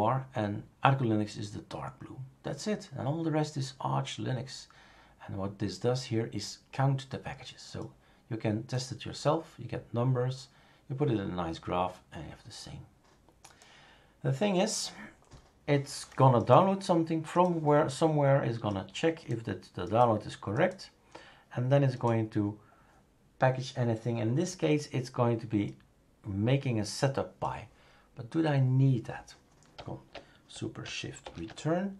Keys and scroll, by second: 31.2 shift+super+Return.